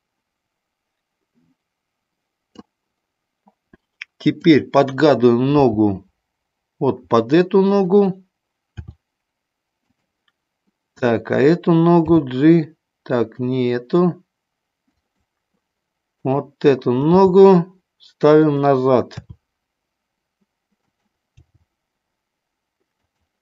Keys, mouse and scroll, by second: 4.2 click, 5.7 g, 8.7 r, 9.9 click, 11.1 click, 12.1 g, 14.9 click, 16.1 click, 17.1 g, 19.1 r, 20.8 click, 21.3 g, 22.9 click.